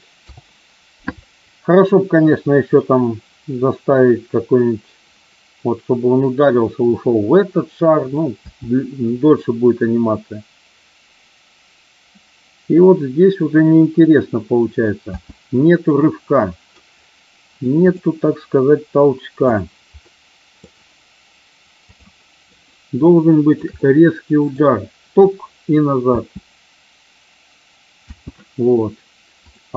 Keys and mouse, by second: 8.4 space, 15.1 space, 15.9-16.7 middle drag, 17.7 click, 19.4 click, 19.9-20.6 middle drag, 23.1 shift+middle click, 23.7 middle click, 26.1 space, 27.9 space, 29.4 click.